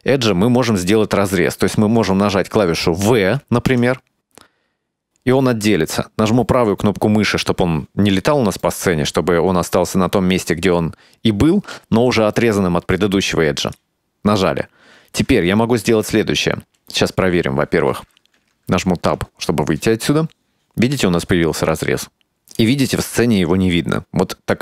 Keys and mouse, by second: 3.8 v, 18.5 Tab, 21.5-22.8 drag, 23.7-24.6 drag.